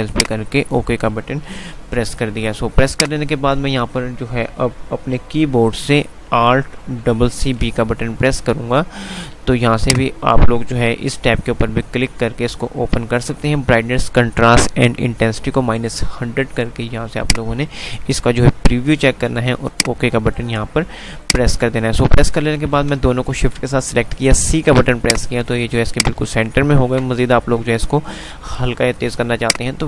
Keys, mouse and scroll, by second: 0.2 click, 1.7 F3, 2.7 F2, 7.2 alt+c, 7.6 alt+b, 9.8 click, 14.7 F5, 17.2 click, 22.5 click, 24.1-24.6 typing, 25.1-29.8 drag, 26.5 ctrl+click.